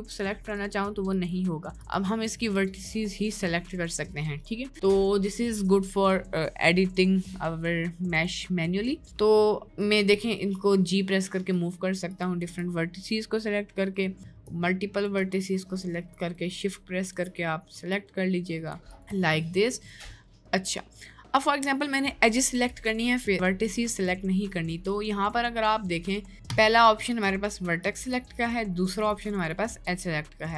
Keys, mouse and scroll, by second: 0.8 click, 1.2 click, 2.6 click, 10.1 g, 12.4 g, 14.1 middle click, 14.5 click, 15.3 g, 17.3 shift+click, 18.0 g, 18.9 shift+click, 20.6 middle click, 21.4 click, 22.5 g, 27.7 g, 27.9 click, 28.1 g, 29.1 click, 29.5 click, 29.8 g.